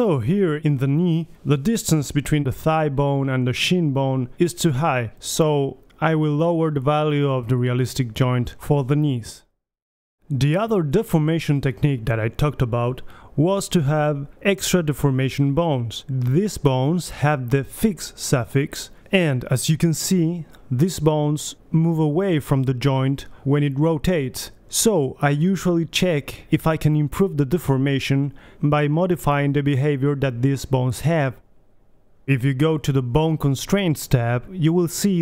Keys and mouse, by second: 0.3-2.1 drag, 2.6-4.5 drag, 3.6 BackSpace, 6.7 middle click, 8.6 click, 9.4 BackSpace, 13.2 g, 19.8 g, 20.0-20.6 drag, 20.4 g, 21.7-22.3 middle drag, 21.9 g, 23.9-25.3 drag, 24.7 g, 26.6-27.3 right drag, 26.6 g, 27.7 right drag, 28.0 middle click, 28.7 right click, 28.9-29.4 drag, 29.0 KP_3, 29.4 g, 32.1 right click, 32.5-32.9 middle drag, 32.9 drag, 32.9 g, 34.1 drag, 34.3 middle click, 34.4 g, 34.5 click, 34.8 middle click, 34.9-35.2 drag.